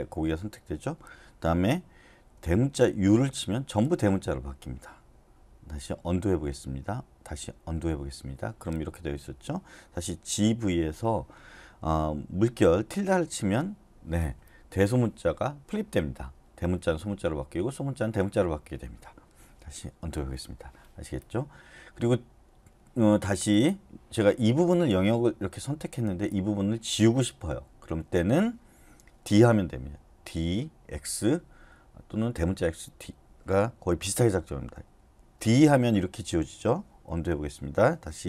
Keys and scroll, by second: 3.0 shift+u, 6.1 u, 10.3-11.4 typing, 13.2 shift+`, 20.0 u, 35.4 d, 37.1 u.